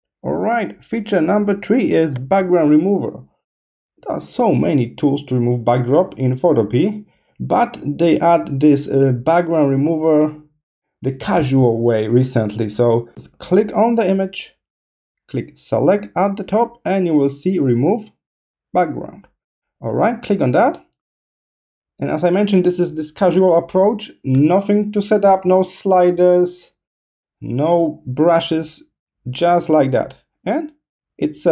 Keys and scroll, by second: 1.6 space.